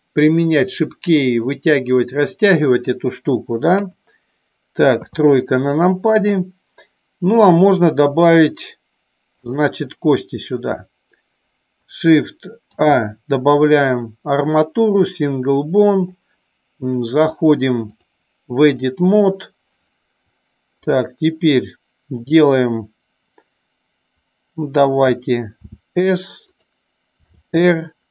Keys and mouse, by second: 9.5 click, 18.0-19.0 drag, 26.7 click.